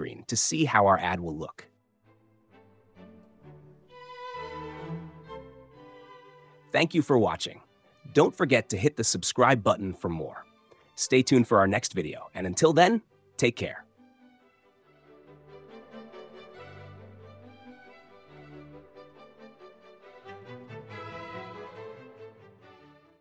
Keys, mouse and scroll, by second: 0.0-1.0 drag, 6.8-8.4 drag, 11.3-12.3 drag, 15.0 click.